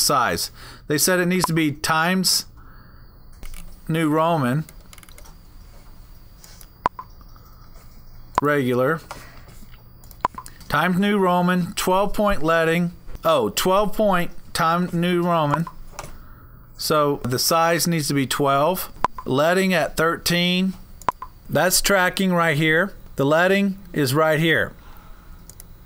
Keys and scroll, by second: 3.2-4.4 typing.